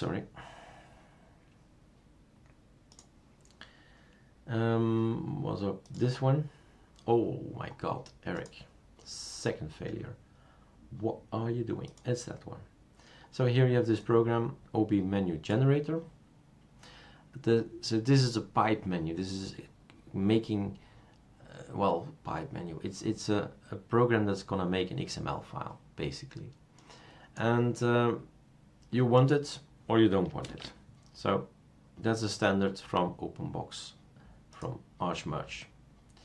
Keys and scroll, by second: 30.5 super+space.